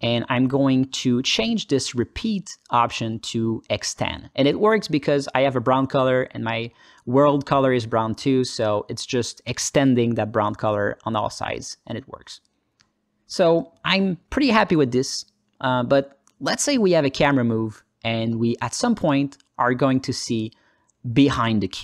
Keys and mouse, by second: 0.2 alt+middle click, 0.5 ctrl+alt+middle click, 1.1-3.3 drag, 10.6 KP_0, 11.5 alt+middle click, 11.9 alt+shift+middle click, 12.2 alt+middle click, 13.4 ctrl+alt+middle click, 13.8-15.6 alt+middle drag, 15.9 ctrl+alt+middle click, 16.2 alt+middle click, 16.8 alt+middle click, 19.5 drag, 20.6-21.8 alt+middle drag.